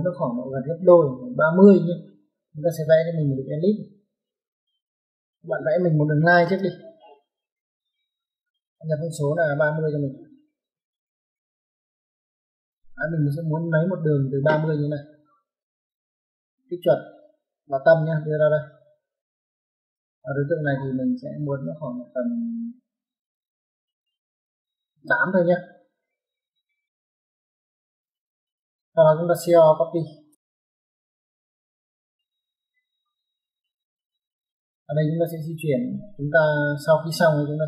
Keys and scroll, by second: 5.2 Escape, 6.0 l, 6.3 space, 10.0-10.5 typing, 12.3 space, 26.4 8, 27.5 Return, 30.3-30.9 typing, 33.8 space, 36.0 Escape.